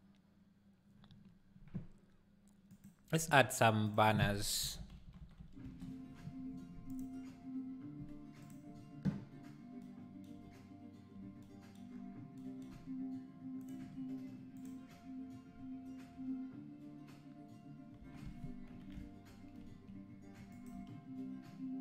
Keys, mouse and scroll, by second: 6.4 n, 6.9-13.7 drag, 13.7-16.9 shift+right drag, 16.9 click, 18.0 r.